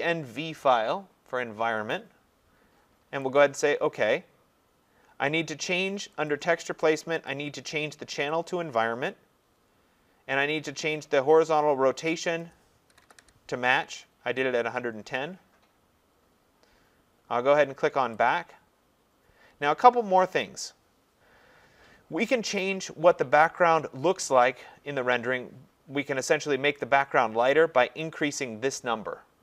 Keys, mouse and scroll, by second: 3.4 click, 6.3 click, 7.3 click, 8.5 click, 9.4-9.8 scroll, 12.4 click, 12.7-13.7 typing, 18.3 click, 19.2-23.4 drag, 28.1-29.4 drag.